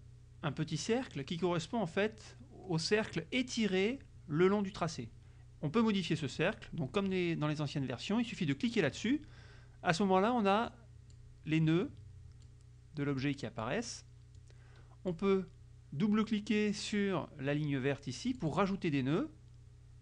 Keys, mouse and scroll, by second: 8.8 click, 10.8 click, 11.9 click, 13.3 click, 14.3-15.4 drag, 18.4 click, 19.3-20.0 drag.